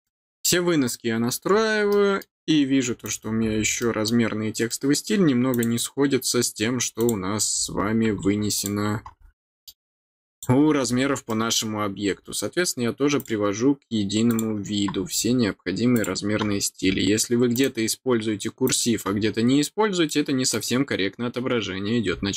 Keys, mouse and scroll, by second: 0.0 middle click, 1.8 middle click, 3.0 click, 3.7 middle click, 4.6 middle click, 5.5 click, 6.9 click, 8.5 click, 9.3 middle click, 10.3 click, 10.9 middle click, 11.2 middle click, 13.1 click, 14.2 click, 15.9 click, 17.5 click, 18.6 click, 19.3 middle click, 19.3 scroll down 1, 20.0 middle click.